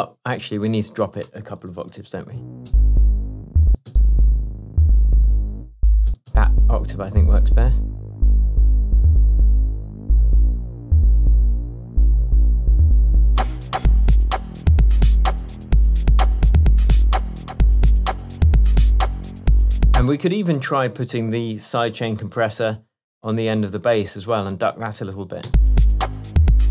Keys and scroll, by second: 1.8 super+a, 2.3 shift+super+Down, 2.7 shift+space, 3.4 shift+Down, 3.8 shift+space, 4.8 space, 5.3 shift+Up, 6.1 shift+space, 7.1 shift+space, 7.3 shift+Tab, 9.5 super+d, 20.1 space, 22.8 super+c, 24.7 super+v, 25.5 super+space.